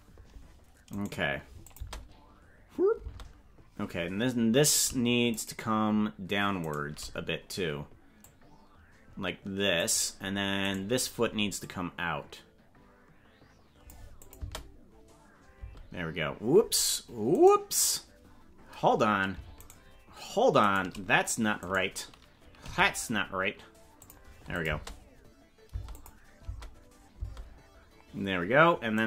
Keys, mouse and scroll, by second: 1.0 right click, 1.7 click, 1.8 space, 3.0 space, 5.5 shift+right click, 6.8 shift+right click, 8.2-9.9 drag, 10.8 right click, 11.6-13.9 drag, 14.2 click, 14.4 space, 15.6 space, 17.5 right click, 19.7 shift+right click, 20.9 right click, 21.6 right click, 22.6 g, 24.6 click, 24.6 space, 25.7 space, 26.0 click, 26.4 space, 27.2 space.